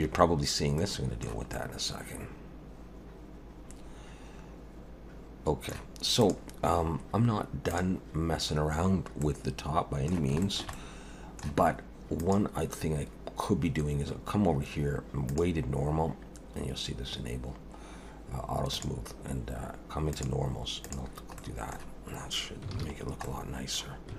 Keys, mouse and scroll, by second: 0.8 middle click, 1.5 middle click, 6.2 click, 7.7 click, 9.2 middle click, 10.4 shift+middle click, 10.7 middle click, 12.2 click, 18.7 click, 20.1 click, 20.9 click, 21.4 middle click, 22.7 alt+a, 23.0 scroll down 2, 23.2 middle click.